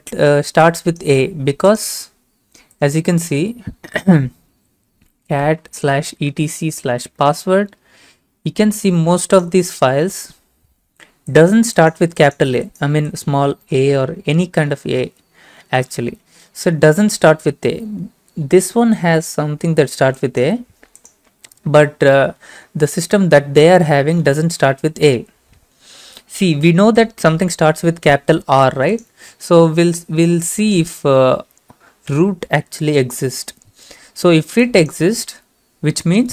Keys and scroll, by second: 4.5 ctrl+c, 4.9-6.8 typing, 6.9 Right, 7.1 Return, 32.1 r.